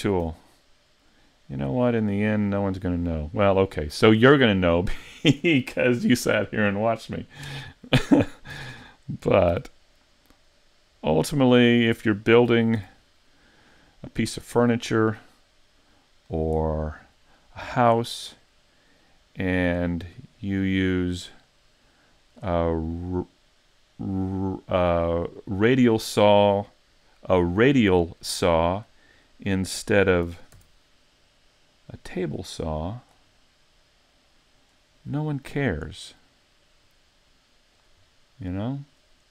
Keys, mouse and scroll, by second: 0.2 z, 0.5 middle click, 7.5 KP_7, 8.5 z, 9.5 g, 11.9 click, 12.8 z, 13.3 middle click, 18.0 middle click, 20.4 click, 22.7 middle click, 25.7 middle click, 27.0 middle click, 29.2 middle click, 30.3 r, 33.1 click, 33.4 middle click, 36.9 click, 38.1 middle click.